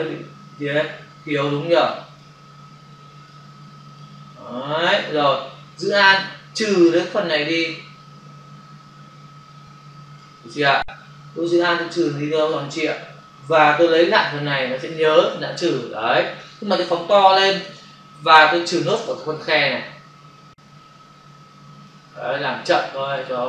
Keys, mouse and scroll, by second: 1.8 click, 2.9 click, 3.6 click, 6.1 alt+click, 11.8 alt+click, 13.8 click, 16.3 space, 16.4 ctrl+click, 19.1 alt+click, 22.6 alt+click.